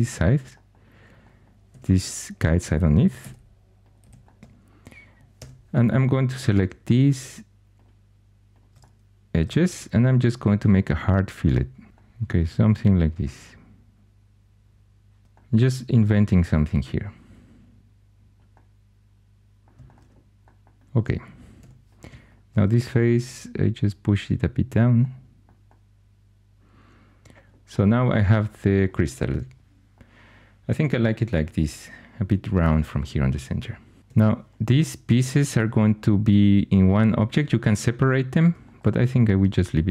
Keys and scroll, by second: 1.7 2, 3.1 x, 4.0 x, 5.3 2, 21.5 3, 34.0 3.